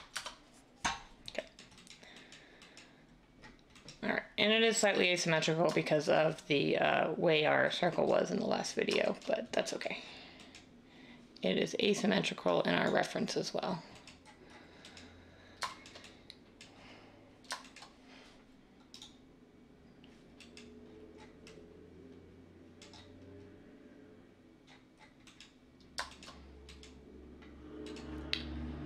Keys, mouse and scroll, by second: 0.0-0.1 typing, 1.3-2.0 typing.